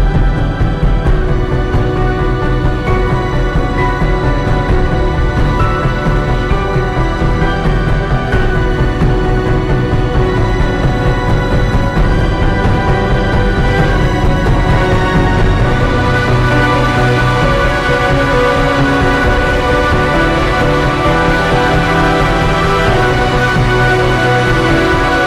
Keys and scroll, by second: 0.5 ], 1.5 ], 1.7 ctrl+z, 3.7 ], 3.9 [, 4.5 ctrl+t, 13.6 [, 13.8 ], 14.8 [, 20.1 ctrl+z, 24.0 ctrl+g, 24.5 1, 24.6 Return.